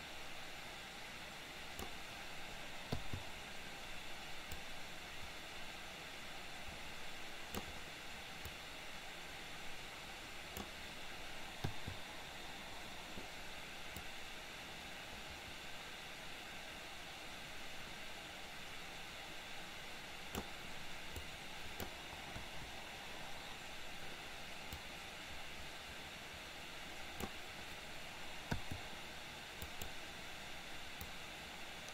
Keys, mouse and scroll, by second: 0.0-2.0 drag, 3.0 i, 4.6-7.8 drag, 8.4-10.8 drag, 11.8 i, 14.1-20.5 drag, 21.4-22.0 drag, 22.4 Delete, 24.9-27.4 drag, 28.6 i, 29.8 click, 31.3-31.9 drag.